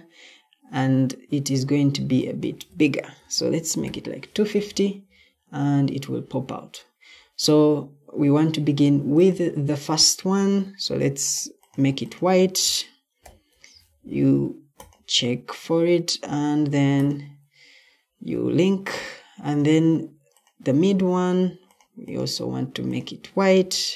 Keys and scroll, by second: 3.1-4.2 typing, 13.1 p, 23.4-23.9 typing.